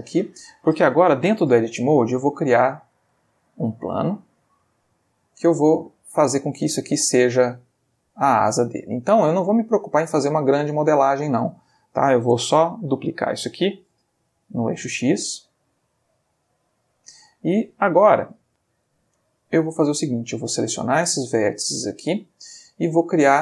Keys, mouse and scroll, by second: 1.6 shift+a, 2.4 click, 3.2 ctrl+middle click, 3.9 ctrl+s, 5.3 click, 5.5 g, 6.7 click, 7.5 s, 8.3 click, 8.6 g, 9.4 click, 11.1 shift+middle click, 14.4 shift+d, 14.7 shift+x, 16.4 click, 20.2 click, 21.3 shift+click, 23.1 click.